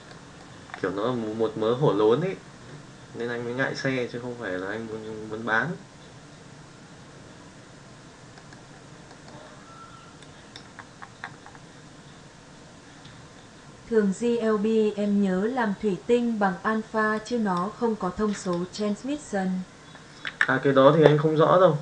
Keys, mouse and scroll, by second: 0.0-0.3 middle drag, 8.3 middle click, 9.0 middle click, 10.1 click, 17.2 click, 18.5-20.3 drag.